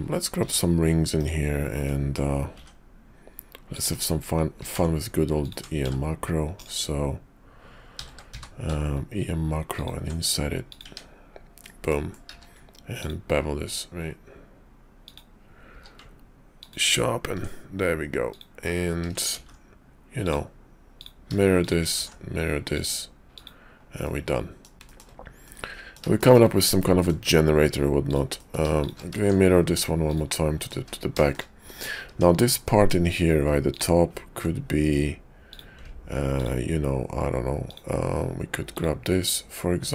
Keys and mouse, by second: 0.4 ctrl+r, 2.5 ctrl+r, 4.5 ctrl+b, 5.8 w, 6.6 click, 7.8 w, 8.0 w, 8.3 q, 10.8 Tab, 11.6 click, 12.3 q, 15.7 q, 18.3 click, 19.3 alt+x, 21.0 click, 21.6 shift+click, 22.0 alt+x, 23.3 click, 24.0 click, 24.8 shift+click, 25.4 middle click, 26.1 shift+click, 26.7 middle click, 27.1 `, 28.0 click, 28.3 middle click, 28.8 shift+click, 29.0 alt+x, 30.1 click, 30.6 middle click, 30.7 `, 31.2 shift+middle click, 31.6 middle click, 32.1 Tab, 32.5 middle click, 33.5 click, 35.5 click, 37.6 ctrl+click, 38.7 ctrl+click.